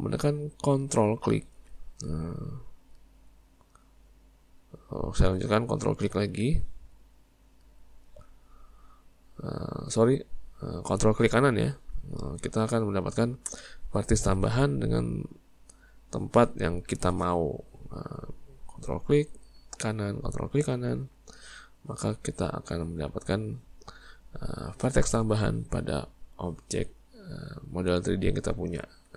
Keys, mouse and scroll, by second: 3.0 ctrl+right click, 7.6 ctrl+right click, 8.9-19.0 middle drag, 19.0 ctrl+right click, 20.5 ctrl+right click, 21.1-27.5 middle drag, 28.2 middle click.